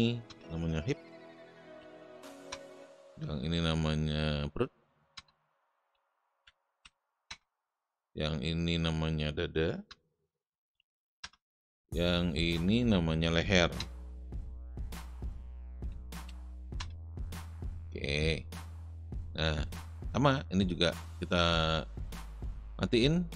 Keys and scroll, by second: 0.3 Return, 1.2-2.7 typing, 5.1 Return, 5.6-7.2 typing, 9.8 Return, 10.2-11.3 typing, 13.8 Return, 14.9-16.7 typing.